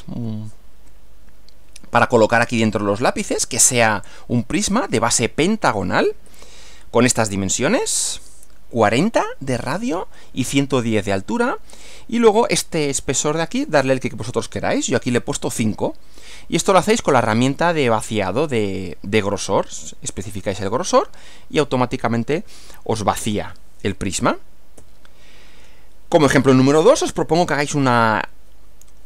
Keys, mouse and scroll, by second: 6.3 Right, 24.8 Right.